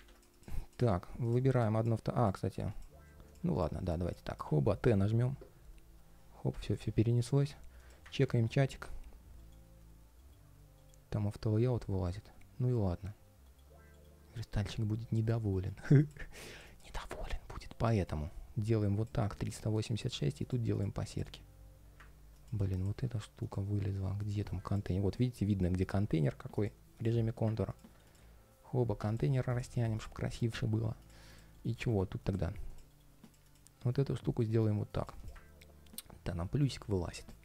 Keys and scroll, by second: 0.0 shift+super+v, 5.2 super+/, 7.9 super+s, 9.1 ctrl+shift+3, 9.9 ctrl+shift+3, 11.4 ctrl+shift+3, 13.2 ctrl+shift+3, 13.8 ctrl+shift+3, 15.3 ctrl+shift+3, 16.8 ctrl+shift+3, 18.0 ctrl+shift+4, 31.3 ctrl+shift+3, 32.0 ctrl+shift+3, 33.0 ctrl+shift+3.